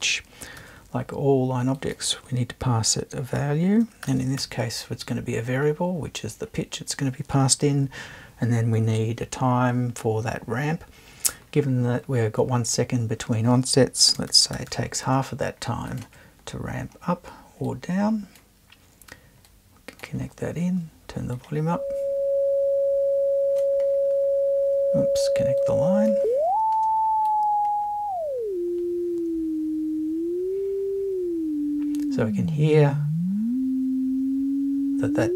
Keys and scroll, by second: 0.6 super+2, 4.0 shift+4, 4.4 shift+l, 5.1 l, 14.1 space, 14.3 5, 14.5 0.